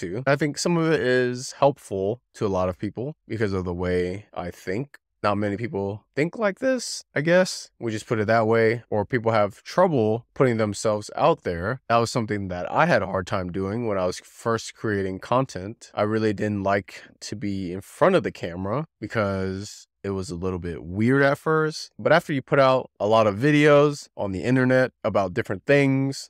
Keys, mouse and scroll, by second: 0.7 click, 0.9 scroll up 3, 1.2 click, 1.7 middle click, 2.1 click, 2.3-2.8 middle drag, 2.8 click, 2.9-3.4 middle drag, 3.6 shift+middle click, 3.7 scroll down 3, 4.0 middle click, 4.1 scroll up 1, 4.4 scroll down 1, 4.6 middle click, 5.0 click, 5.0 middle click, 5.7-6.0 scroll up 7, 6.0 click, 6.4 alt+z, 6.5 click, 6.7 click, 7.3 alt+z, 7.4 scroll up 2, 7.8 shift+click, 8.1 middle click, 8.3 scroll down 8, 8.4 shift+middle click, 9.0 scroll up 2, 9.2 middle click, 10.2 alt+z, 10.3-10.6 scroll up 3, 10.6 r, 10.8 click, 12.9 alt+z, 13.2 click, 13.4-13.7 scroll down 2, 13.5 middle click, 13.7 middle click, 14.4-15.0 scroll up 1, 15.0 click, 15.3 w, 15.6 middle click, 15.8 click, 16.7 middle click, 17.4 click, 18.4 click, 18.5 middle click, 18.7 scroll down 2, 19.0 shift+middle click, 19.1 scroll up 1, 19.2 middle click, 19.8 click, 19.9 middle click, 20.2 middle click, 20.5 ctrl+click, 20.6 scroll up 1, 20.9 z, 21.2 click, 21.8 middle click, 23.6 click, 24.9 shift+click, 25.6 middle click, 26.2 click.